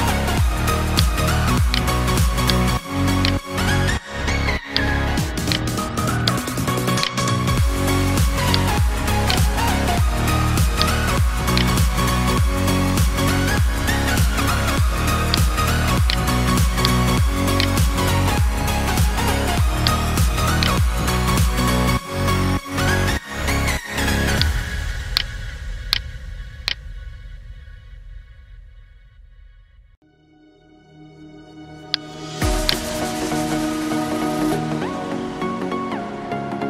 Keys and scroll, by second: 21.5 ctrl+j, 30.4 space.